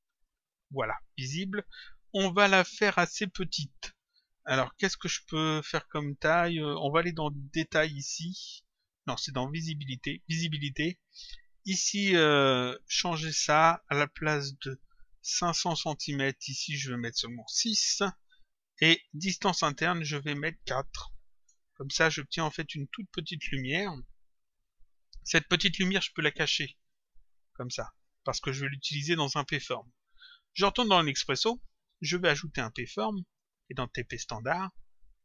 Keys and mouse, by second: 0.0 click, 7.5 click, 10.1 click, 13.3 click, 19.7 click, 21.4 Return, 26.7 click, 29.3 click, 33.3 click, 34.5 click.